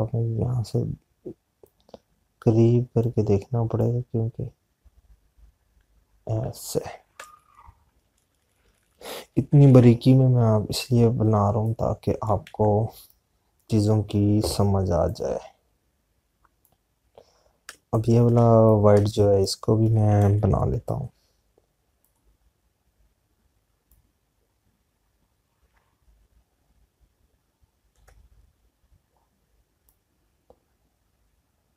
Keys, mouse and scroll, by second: 16.3 click, 19.2 space, 24.7 click.